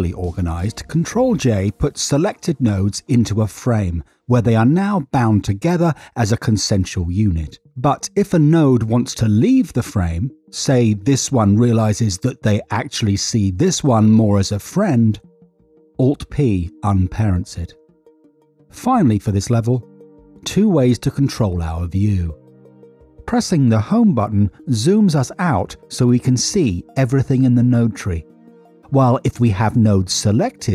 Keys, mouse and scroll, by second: 0.3 middle click, 4.2 click, 6.0 ctrl+j, 8.5 middle click, 9.1 middle click, 9.4 middle click, 10.5-10.9 drag, 16.2 click, 17.0 alt+p, 19.7 middle click, 23.6 Home, 28.9 click, 29.1 click.